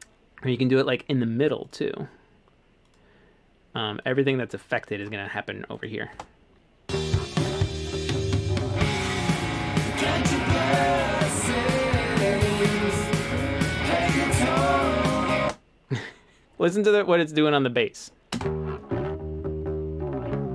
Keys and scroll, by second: 6.1-7.3 typing, 15.5 space, 18.4 space.